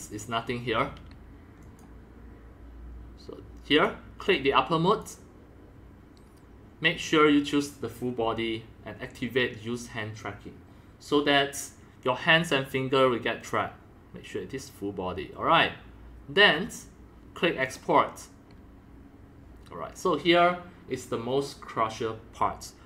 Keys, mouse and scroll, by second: 1.8 click, 3.7 click, 4.2 click, 4.9 click, 17.6-22.8 drag.